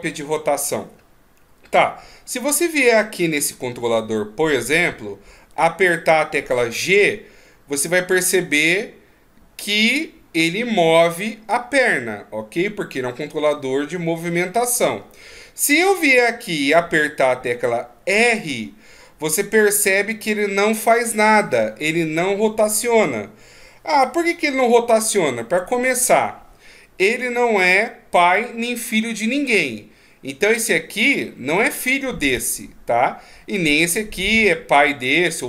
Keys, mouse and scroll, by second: 2.6 right click, 3.0-5.1 scroll up 2, 6.8 g, 16.0 r, 30.5 right click, 35.0 right click.